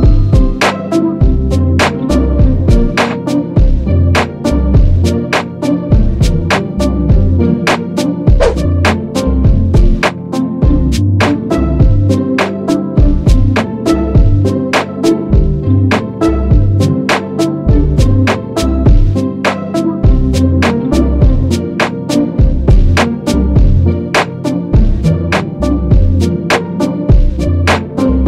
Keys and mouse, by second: 0.4 space.